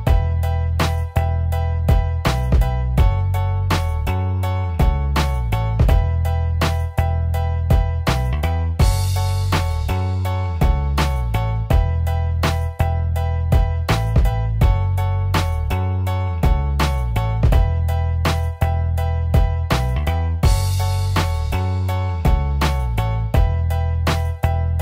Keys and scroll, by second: 3.8 ], 20.4 ctrl+t.